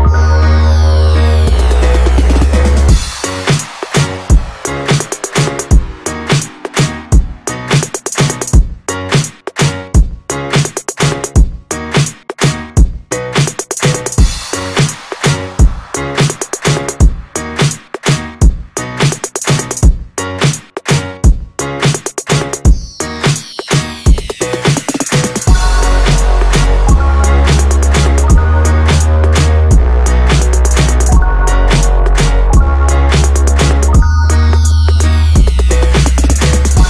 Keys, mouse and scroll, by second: 0.4 Tab, 1.4-2.7 drag, 3.9 ctrl+click, 5.6 ctrl+click, 6.9 click, 9.0 ctrl+click, 10.2-13.1 drag, 13.9 click, 16.0 ctrl+click, 17.9-20.6 drag, 20.6-21.6 scroll up 1, 21.6 ctrl+b, 24.5 Tab, 26.2 click, 27.1 Tab, 27.9 click, 28.8-30.1 drag, 30.9 click, 32.2 scroll down 1, 33.7 click, 35.5 ctrl+click, 36.3 click.